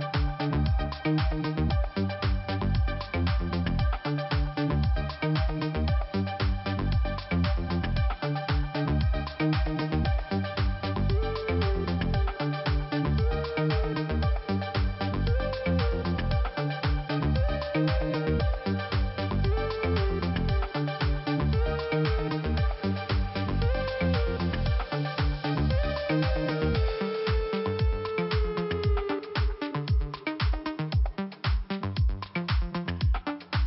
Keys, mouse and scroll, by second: 0.8 middle click, 1.9 click, 2.9 click, 6.6 click, 8.0 middle click, 9.1 click, 10.3 click, 13.9 click, 14.1 click, 14.8 click, 18.3 click, 19.6 click, 20.3 click, 21.6 click, 24.3 click, 24.4 click, 25.0 click, 25.1 click, 25.9 click, 26.0 click, 26.3 Return, 27.0 click, 27.7 click, 27.8 click, 29.1 middle click, 33.0 click, 33.5 middle click.